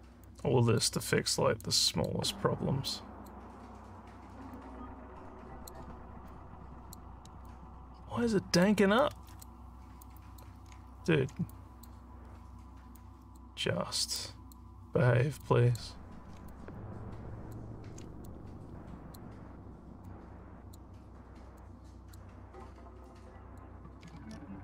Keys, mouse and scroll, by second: 0.3 click, 1.6 click, 2.9 click, 4.5-5.7 drag, 6.3 click, 7.5-8.6 alt+drag, 8.9 click, 10.0 click, 10.8 alt+scroll down 3, 11.5 click, 13.0 click, 14.2 click, 15.5 click, 16.5-17.5 alt+drag, 18.2 click, 20.1 click, 21.6 click, 23.2 click, 24.3 alt+scroll, 24.4 alt+scroll.